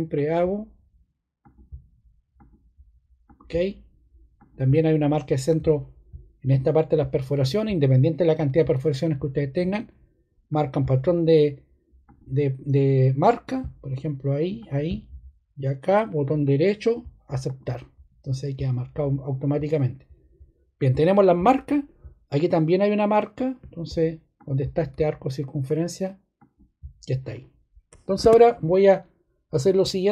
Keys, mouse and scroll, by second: 28.1 ↺.